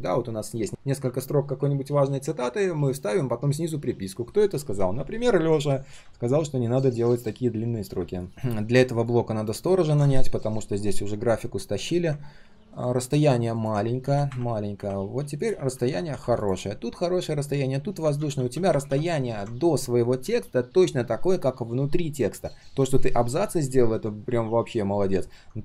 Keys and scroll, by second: 5.7 ctrl+z, 9.8 ctrl+z, 18.1 ctrl+z, 18.3 ctrl+z, 18.5 ctrl+z.